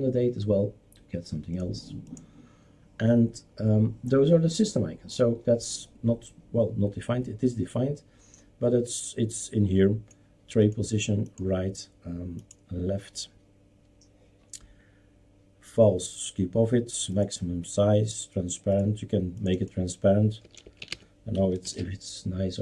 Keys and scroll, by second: 20.2-21.4 typing, 21.6 ctrl+s.